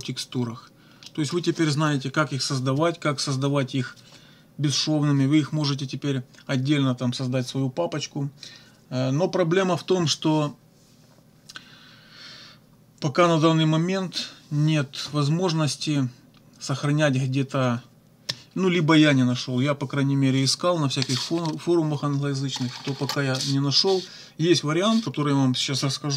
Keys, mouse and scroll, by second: 1.1 middle click.